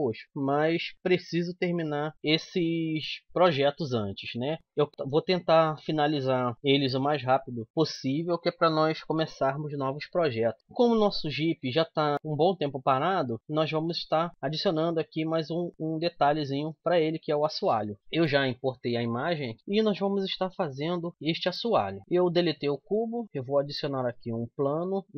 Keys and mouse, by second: 18.7-19.8 middle drag, 23.1 shift+a.